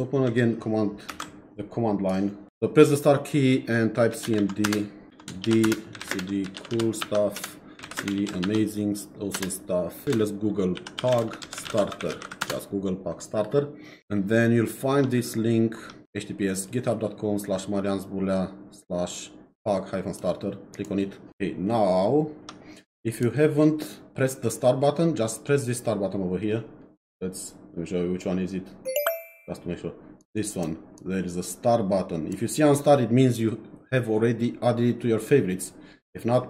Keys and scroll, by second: 3.9-8.6 typing, 7.4 Return, 9.3 Return, 10.0-12.7 typing.